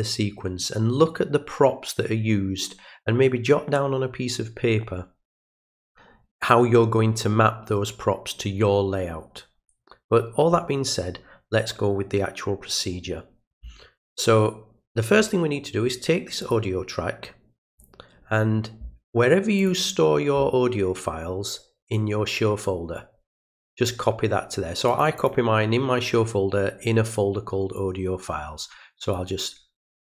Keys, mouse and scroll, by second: 16.4 click, 17.7 click, 19.6 click, 22.0-23.6 drag, 24.9 click, 25.2 click, 27.8-29.1 drag.